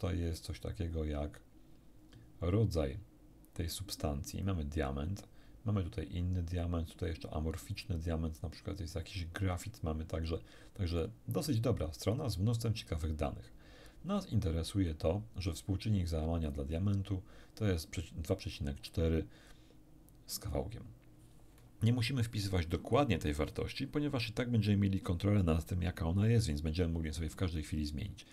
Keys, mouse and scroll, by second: 4.3 click, 16.5 click, 18.7-19.5 scroll down 2.